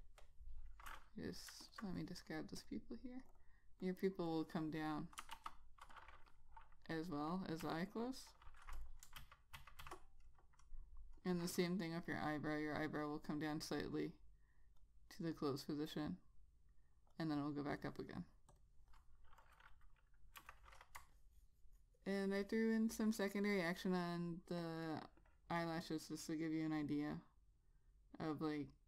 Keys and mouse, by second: 1.8 alt+click, 5.5 ctrl+z, 6.1 click, 7.8 F6, 8.1 click, 9.4 shift+Down, 9.8 shift+Down, 10.0 shift+Down, 13.7 click, 20.6 F6, 21.2 Return, 24.1 click.